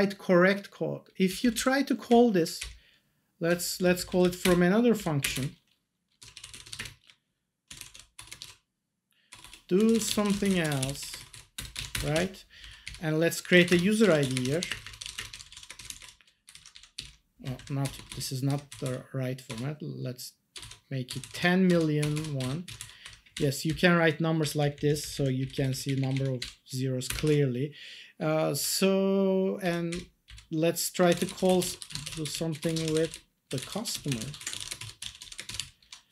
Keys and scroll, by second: 1.2 Down, 2.1 Up, 3.6 Down, 4.4 Return, 4.9 Down, 5.2 Return, 6.0-11.8 typing, 11.9 Return, 12.1 ctrl+s, 12.6 Down, 12.8 Up, 13.4-19.4 typing, 17.4 Left, 21.2 0, 22.0 BackSpace, 22.6 0, 23.0 1, 23.6 Left, 24.4 Right, 24.6 Left, 25.4 Down, 25.8 Up, 27.0 Return, 27.2 ctrl+s, 29.9 Up, 30.2 Down, 31.1-36.0 typing.